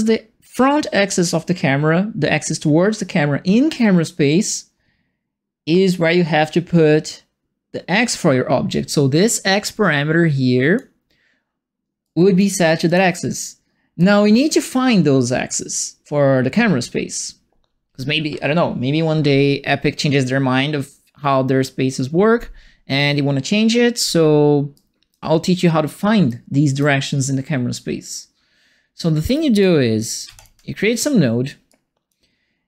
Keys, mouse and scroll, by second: 9.5-10.7 drag, 12.0 right click, 12.8 click, 13.9 right click, 24.7 right click, 26.2 right click, 29.3 right click, 30.2 3, 30.3 click, 31.6 click.